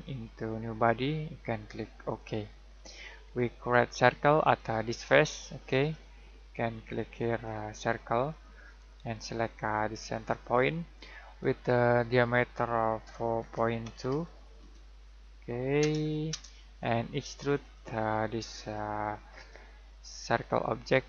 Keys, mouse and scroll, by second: 2.7 middle click, 3.2-4.4 scroll down 1, 4.4 click, 13.4-15.0 typing, 15.8 Return, 17.6 click.